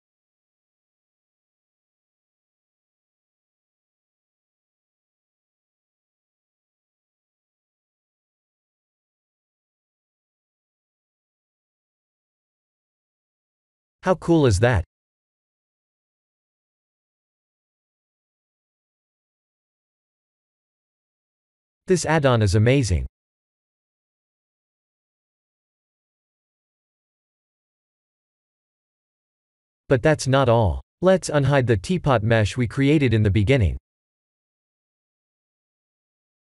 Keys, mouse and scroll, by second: 0.5 alt+click, 1.3 alt+shift+click, 4.2 ctrl+e, 8.5 click, 10.7 click, 13.6 click, 14.0 middle click, 16.0 Tab, 16.3 middle click, 21.4 middle click, 21.5 middle click, 21.7 middle click, 23.1 x, 23.9 shift+a, 30.7 click, 31.4 middle click, 31.9 shift+z, 32.2 middle click, 32.8 middle click, 33.0 Tab, 33.6 click, 33.9 Tab, 34.4-34.8 scroll up 2, 34.9 shift+middle click, 35.0 shift+middle click, 35.5-36.2 scroll up 2, 36.2 2.